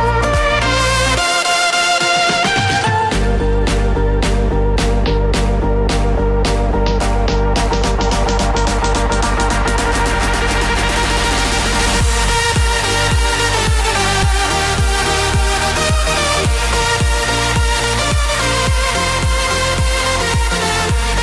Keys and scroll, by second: 6.2 F5, 8.7 ctrl+c, 12.3 ctrl+v, 12.6 Return, 18.0 ctrl+v, 19.3 Return.